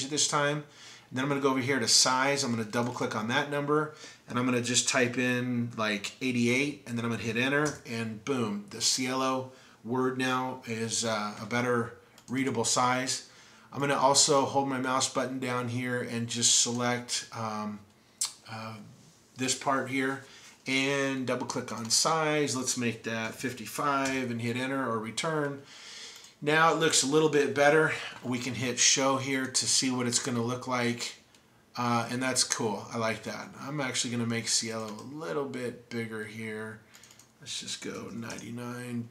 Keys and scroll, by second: 6.5 typing, 23.3 typing, 38.0 typing, 38.4 Tab.